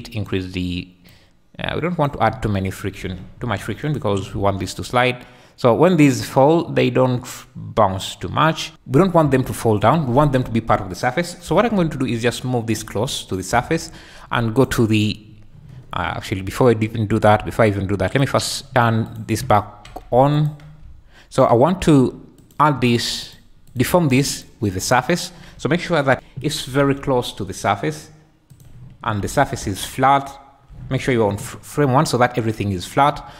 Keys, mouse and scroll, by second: 1.1-2.2 drag, 3.0 alt+a, 3.9 shift+click, 4.3 space, 8.7 KP_1, 9.3 Escape, 11.4 g, 11.7 z, 12.7 click, 14.5 click, 18.4 click, 18.7 click, 19.0 click, 19.6 `, 20.1 q, 20.8 `, 23.2-24.4 drag, 24.6 `, 26.1 KP_1, 26.6 g, 27.0 z, 28.5 click, 29.2 `, 31.7 `.